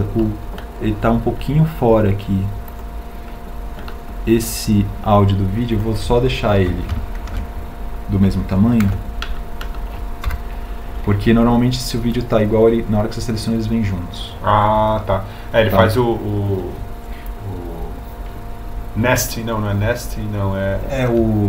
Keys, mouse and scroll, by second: 8.4 shift+s.